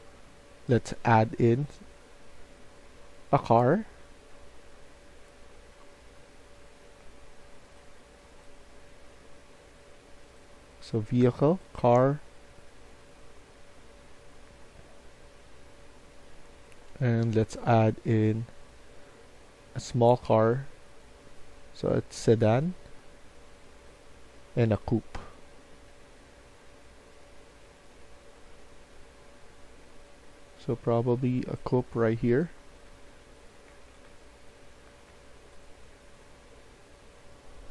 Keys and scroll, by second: 31.5-34.9 typing.